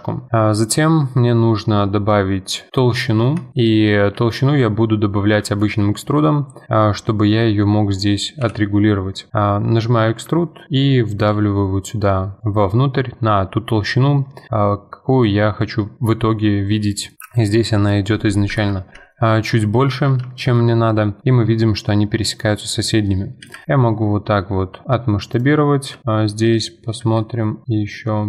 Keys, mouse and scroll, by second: 3.0-3.4 middle drag, 3.4 Tab, 3.6 middle click, 4.1 a, 4.4-8.4 middle drag, 8.4 KP_7, 9.3 middle click, 10.1 e, 17.1 middle click, 17.2 KP_7, 18.5 F4, 19.1 shift+middle click, 19.5-19.8 scroll up 5, 20.3-23.1 shift+middle drag, 25.6-26.0 scroll up 3, 26.0 shift+middle click, 26.3-26.8 scroll up 2, 27.0 s.